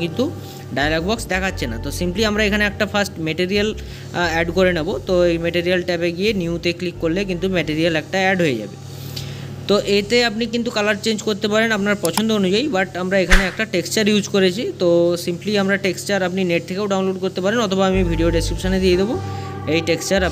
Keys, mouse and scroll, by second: 13.3 scroll up 2, 18.2-20.3 middle drag.